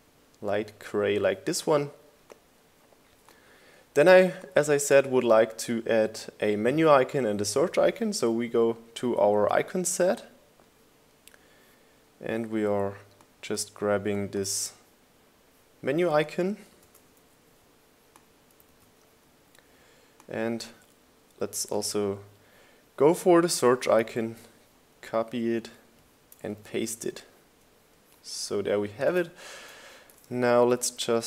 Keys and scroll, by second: 18.4 super+c, 20.2 super+v, 26.0 super+c, 27.7 super+v.